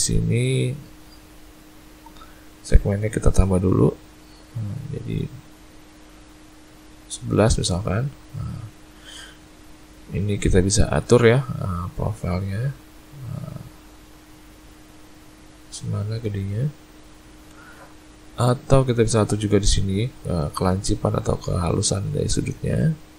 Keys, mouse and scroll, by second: 3.2-4.0 click, 3.6 click, 4.5 click, 4.7 click, 4.9 click, 5.2 click, 5.6 click, 5.8 click, 7.5 middle click, 9.3 middle click, 11.8 click, 13.8 click, 19.1 click.